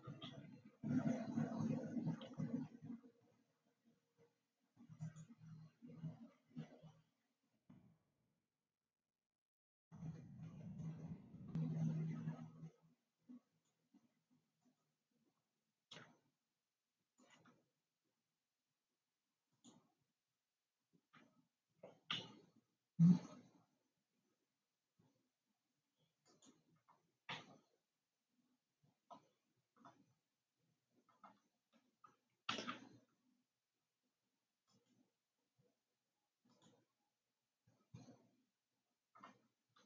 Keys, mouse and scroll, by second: 0.6 r, 8.2 ctrl+r, 17.7 click, 20.1 click, 22.6 e, 28.2-31.2 middle drag, 32.9 e, 36.9 click.